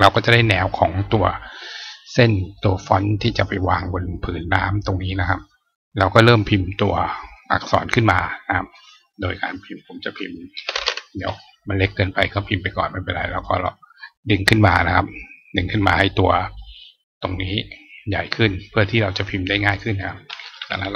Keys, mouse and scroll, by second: 7.2 click, 8.0 click, 12.1 click, 13.3 click, 19.5 click.